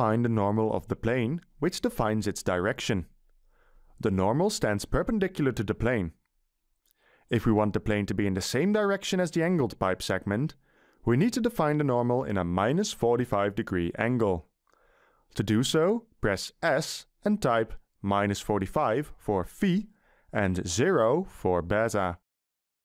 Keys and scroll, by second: 16.5 s, 17.3 Delete, 19.4 -, 20.1 4, 20.8 5.